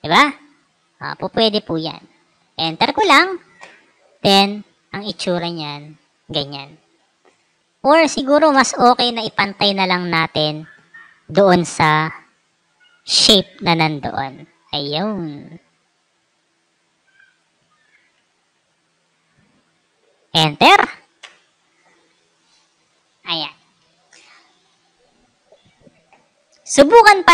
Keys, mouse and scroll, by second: 0.4-1.1 drag, 2.9 Return, 4.0 click, 7.8 ctrl+z, 9.5 ctrl+t, 10.3-12.0 drag, 13.9-15.0 drag, 15.7-17.3 drag, 18.8 Left, 20.7 Return, 21.1 Return, 23.0-23.5 alt+scroll up 2, 23.5 alt+scroll down 2, 26.8 click.